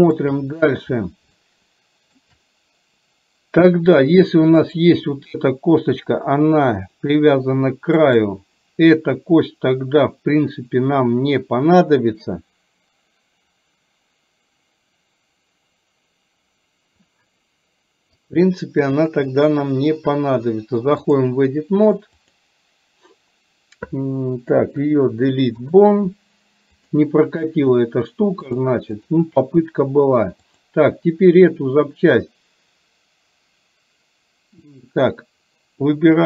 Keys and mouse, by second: 1.5 shift+middle click, 4.7 click, 8.1 click, 18.2-21.3 drag, 22.2 click, 24.6 Delete, 26.8 click, 28.7 click, 30.6 click.